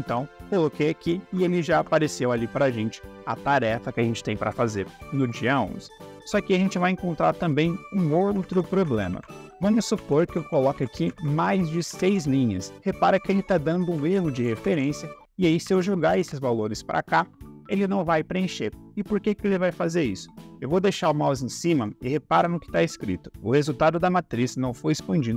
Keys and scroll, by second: 1.3 Caps_Lock, 8.4 ctrl+c, 8.6 Down, 8.8 ctrl+v, 9.0 Down, 9.2 ctrl+v, 9.8 Down, 10.2 ctrl+v, 10.4 Down, 10.6 ctrl+v, 10.8 Down, 11.1 ctrl+v, 11.2 Down, 11.4 ctrl+v, 11.7 Down, 11.9 ctrl+v, 13.9 ctrl+c, 14.3 ctrl+v.